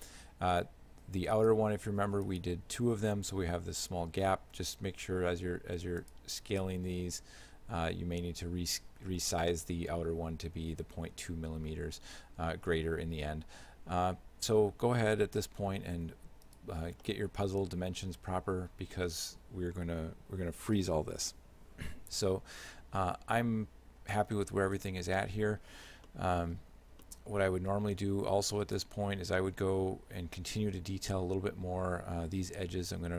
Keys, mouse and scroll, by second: 1.4 right click, 2.3 shift+right click, 5.1 g, 6.8 s, 17.1 shift+middle click, 24.4 shift+middle click, 26.1 middle click, 27.1 shift+middle click.